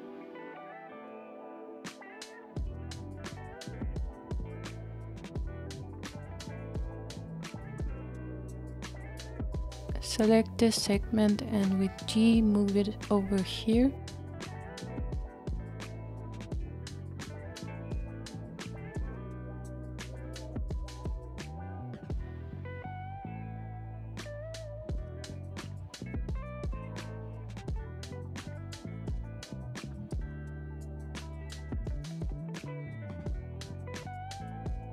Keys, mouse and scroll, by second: 7.7 click, 11.0 g, 24.0 click, 25.1-28.1 middle drag, 28.1 click, 28.8 g.